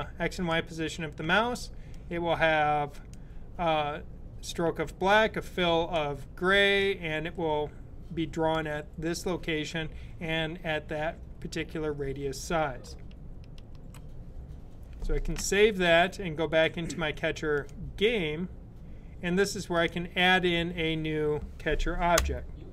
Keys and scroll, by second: 13.5 super+s.